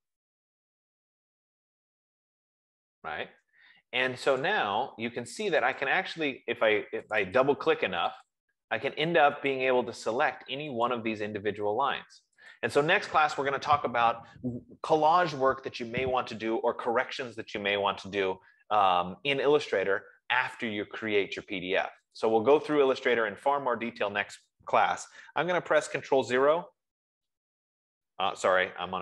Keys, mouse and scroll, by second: 4.9 click, 6.3 click, 7.4 click, 7.7 click, 8.6 click, 9.9 click, 11.2 click, 12.9 click, 21.6 F15, 22.6 click, 23.3 click, 27.0 super+0.